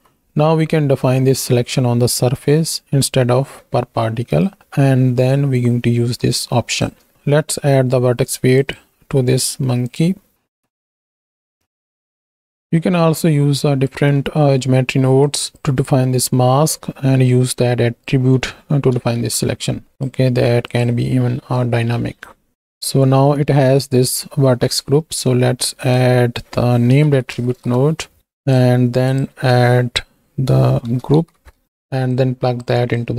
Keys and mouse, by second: 2.5 shift+middle click, 5.4-6.8 drag, 8.5-10.6 drag, 11.1 middle click, 11.4 middle click, 11.8 middle click, 12.1 middle click, 12.4 middle click, 14.5 middle click, 15.2 click, 15.7 middle click, 17.5-19.1 drag, 19.1 KP_1, 19.9-20.8 drag, 22.0 middle click, 24.8 shift+a, 29.2-31.6 drag, 32.3 click, 32.9 click.